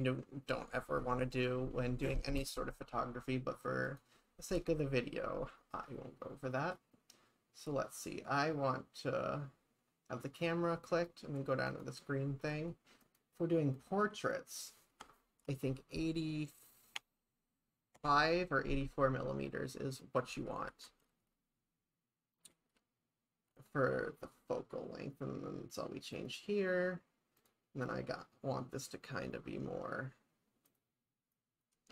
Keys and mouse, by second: 3.9 click, 11.7 click, 13.1-18.9 drag, 20.7 shift+`, 26.2 click, 27.4 click, 30.7-31.9 drag.